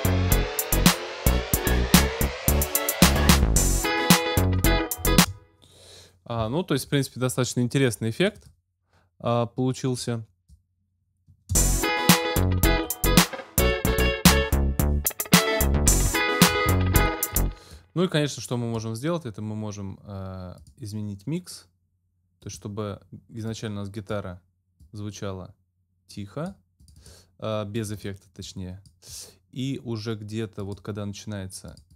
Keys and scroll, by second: 5.2 space, 11.6 space, 17.4 space.